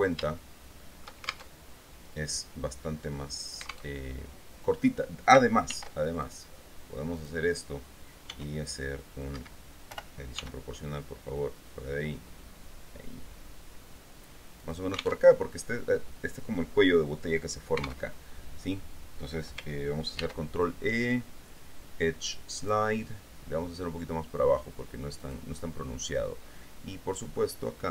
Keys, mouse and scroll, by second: 0.5 shift+click, 1.7 alt+shift+Tab, 4.1 alt+Tab, 5.9 ctrl+r, 6.4 ctrl+r, 6.4 ctrl+click, 7.3 click, 8.5 s, 9.5 Escape, 10.2-11.2 typing, 14.8 click, 15.4 alt+Tab, 18.3 alt+Tab, 20.3 ctrl+e, 22.8 click, 25.5 click, 27.5 middle click.